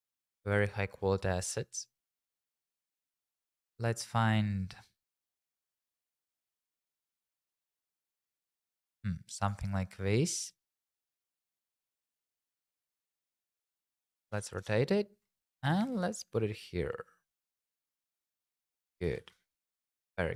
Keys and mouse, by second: 13.8 r, 14.0 z, 14.2 KP_9, 14.3 KP_0, 14.6 KP_Enter, 15.6 g, 16.0 shift+z, 17.8 click, 19.0 g, 19.2 shift+z.